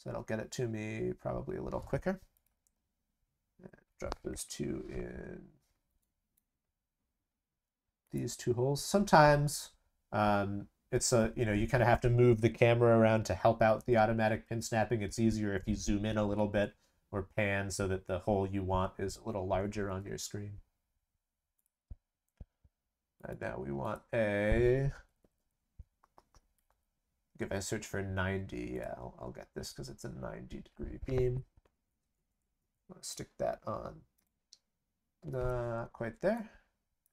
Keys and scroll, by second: 2.6 ctrl+v.